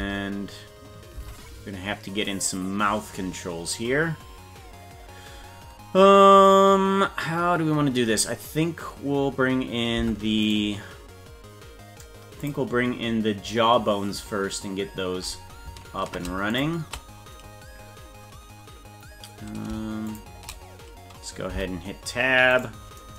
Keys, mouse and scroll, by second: 0.2 Tab, 1.4 Tab, 10.0 Tab, 10.5 right click, 12.5 click, 16.6 shift+click, 17.7-18.1 scroll down 4, 20.1 shift+click, 21.6 Tab, 22.6 right click.